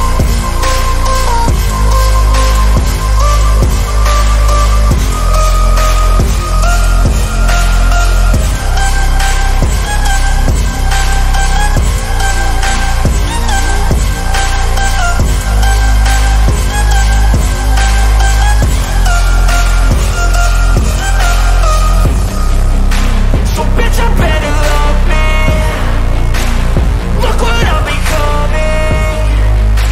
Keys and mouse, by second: 0.4-3.1 drag, 4.4 middle click, 11.3-12.4 middle drag, 13.8 click, 15.4 click, 19.7-21.1 middle drag, 29.7 click.